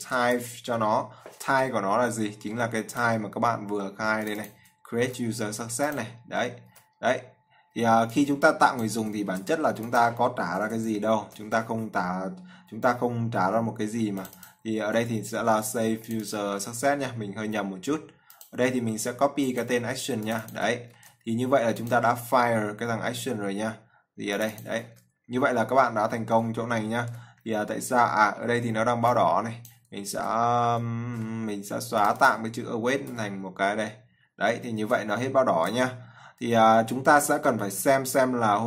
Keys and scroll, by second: 5.3 ctrl+c, 7.0 ctrl+v, 9.6 ctrl+c, 11.4 ctrl+v, 15.8 ctrl+c, 16.8 ctrl+v, 21.2 ctrl+c, 25.2 ctrl+v, 35.5 ctrl+s.